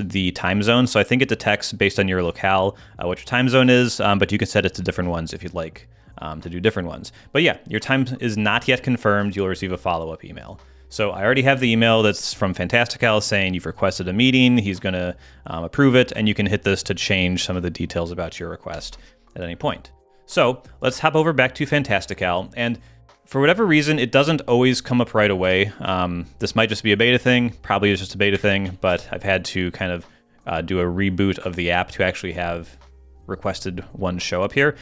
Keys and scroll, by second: 19.6 super+h.